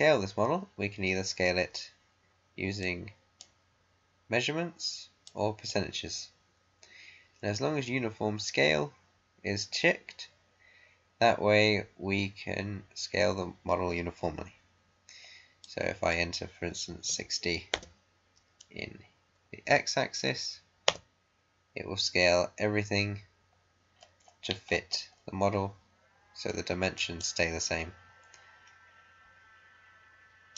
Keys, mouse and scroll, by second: 2.7-8.2 drag, 15.5-17.0 drag, 17.0-17.7 typing, 20.8 Return, 23.9-24.2 scroll down 1, 26.4 middle click, 27.1-30.5 right drag.